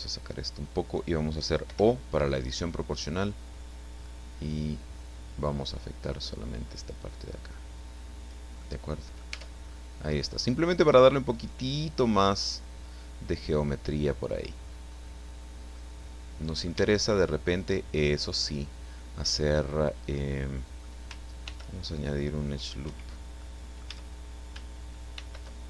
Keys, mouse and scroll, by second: 1.6 o, 3.1 click, 4.0-4.6 scroll up 3, 4.6 scroll down 1, 4.8-5.1 scroll up 1, 5.1-6.4 scroll down 1, 6.4 scroll up 1, 6.6 scroll down 1, 6.6 scroll up 1, 6.8-8.2 scroll down 1, 8.6 middle click, 9.3 Tab, 9.7 scroll up 1, 9.8 scroll down 1, 10.1-14.6 middle drag, 14.9 scroll up 1, 15.3 scroll down 2, 15.7-16.8 middle drag, 16.8 Tab, 17.4-21.0 middle drag, 21.4 ctrl+r, 22.8 Escape, 23.4 click, 23.8 a, 25.1 ctrl+r.